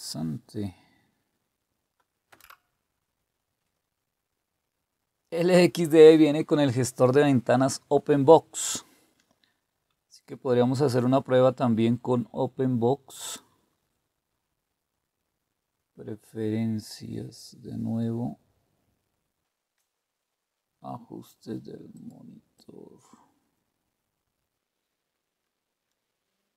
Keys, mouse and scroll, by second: 2.3 Return, 13.2 click, 18.1-20.1 scroll down 1, 20.1-20.5 scroll up 1, 20.5 click, 21.9 click, 22.5-25.1 drag, 25.4 click, 25.9 click.